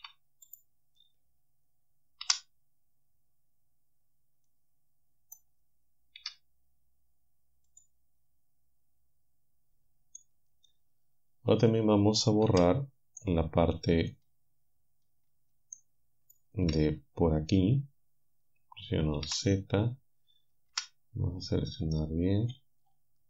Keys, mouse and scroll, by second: 0.0 Delete, 0.5 click, 2.3 b, 4.5-5.5 drag, 6.2 Delete, 7.7 click, 10.2-11.9 drag, 12.5 z, 13.2-14.3 drag, 14.6-15.7 drag, 19.3 z, 20.7 c, 22.5-23.1 scroll down 2.